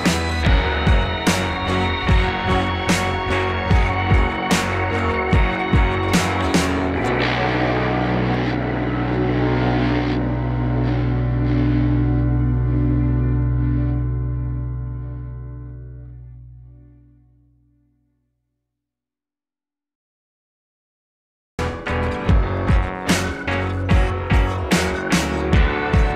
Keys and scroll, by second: 0.1 ctrl+=, 0.6 ctrl+=, 10.5 ctrl+0, 10.6 ctrl+=, 11.1 ctrl+c, 11.2 ctrl+v, 12.7 Right, 12.8 Down, 12.9 Left, 13.5 Right, 13.7 Up, 13.7 Down, 13.8 Right, 14.1 Left, 14.3 Right, 14.4 Down, 15.7 Delete, 17.4 ctrl+a, 17.7 ctrl+a, 19.6 Delete, 19.8 Delete, 20.3 Delete, 20.6 Delete, 21.8 ctrl+0, 21.9 ctrl+=, 22.7 ctrl+z, 22.9 Delete, 23.1 Delete, 23.3 ctrl+a, 23.8 ctrl+a, 23.9 ctrl+-, 24.7 Delete, 25.0 Delete, 25.5 Delete, 25.8 Delete.